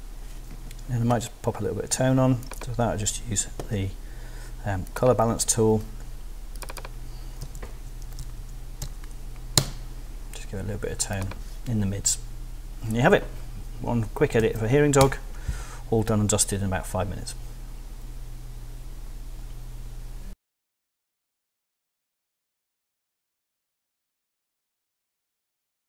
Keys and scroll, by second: 7.2-8.8 typing, 9.6 Return, 14.4 super+w, 15.0 super+Return, 15.6 Return.